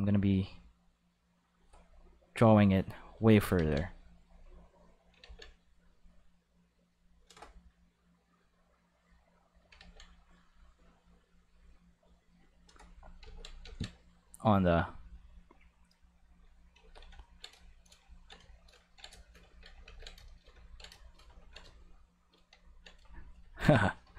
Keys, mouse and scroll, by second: 0.0-1.7 drag, 2.6 click, 3.3 ctrl+z, 3.5 ctrl+z, 4.2 click, 5.2 ctrl+z, 5.5 click, 6.5 click, 8.7 click, 8.8 click, 9.7 ctrl+z, 10.1 click, 11.2 click, 12.1 click, 13.2 ctrl+z, 13.6 ctrl+z, 14.4 click, 16.7 ctrl+s, 18.8 ctrl+middle click, 19.1 shift+middle click, 19.4 ctrl+middle click, 19.8 ctrl+s, 20.2 shift+middle click, 20.6 ctrl+middle click, 20.9 shift+middle click, 21.3 ctrl+middle click, 21.7 shift+middle click.